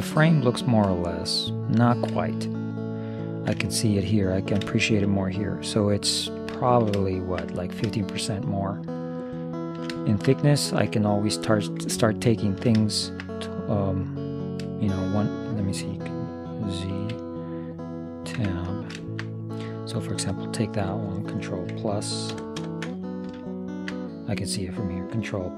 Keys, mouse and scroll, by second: 1.3-6.4 middle drag, 6.7-12.4 middle drag, 13.1 middle click, 14.8-16.6 middle drag, 17.1 z, 18.4 Tab, 18.8-20.0 middle drag, 20.0-22.0 drag, 22.4 ctrl+KP_Add, 22.7 ctrl+KP_Add, 23.6-25.2 middle drag.